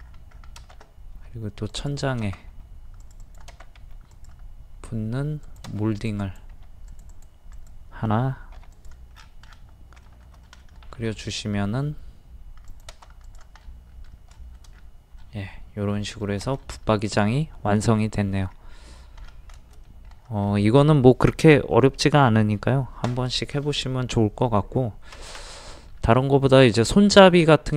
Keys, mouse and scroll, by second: 0.0 scroll up 1, 1.7-2.8 drag, 6.6 typing, 8.6 typing, 9.1-10.0 scroll down 1, 10.4 middle click, 11.1 shift+middle click, 12.7 click, 13.6 middle click, 14.7 scroll down 1, 15.2 middle click, 16.2 shift+middle click, 18.4 scroll up 1, 18.8 scroll down 1, 19.9 middle click, 20.4 scroll up 1, 25.7 middle click, 26.2-26.7 scroll up 1, 27.1 scroll down 1.